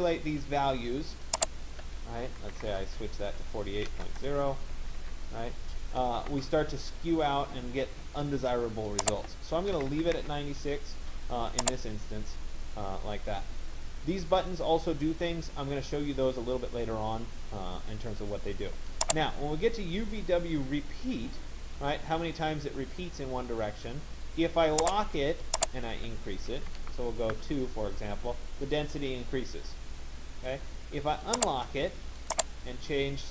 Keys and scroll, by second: 2.3 8, 4.0 Delete, 5.1 Tab, 9.5 9, 26.3 2, 27.4 Return, 33.2 1.